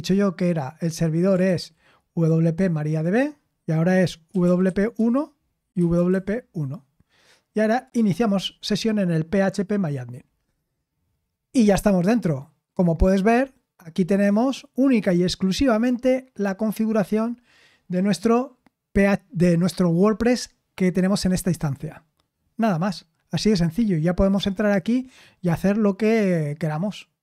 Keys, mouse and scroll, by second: 1.4 ctrl+v, 1.4-4.3 ctrl+drag, 4.0-6.5 typing, 8.9-10.3 typing.